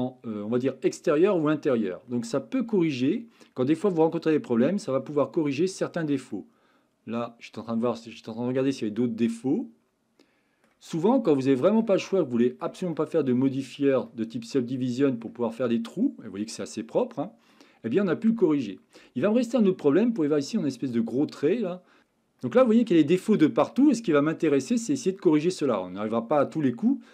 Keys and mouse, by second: 2.5-4.9 middle drag, 5.1 shift+middle click, 6.3-8.0 middle drag, 8.7-10.6 middle drag, 11.4-11.8 shift+middle drag, 12.1-12.6 middle drag, 12.9-13.8 shift+middle drag, 14.0-15.2 middle drag, 15.6-16.4 middle drag, 17.2-17.5 middle drag, 18.5-19.0 middle drag, 19.2 shift+middle drag, 21.7 middle drag, 22.4-23.4 middle drag, 24.1-24.8 middle drag, 25.3-27.1 middle drag.